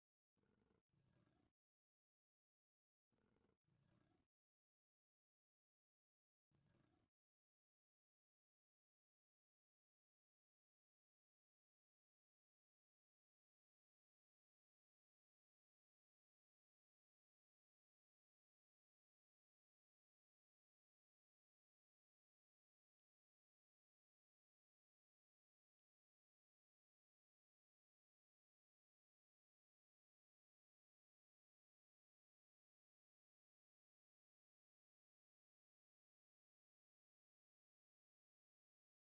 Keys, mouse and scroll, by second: 8.7 click, 13.4-15.7 drag, 16.3 click, 17.0 click, 17.5 click, 18.0 click, 29.7-35.6 drag, 36.1-38.4 drag.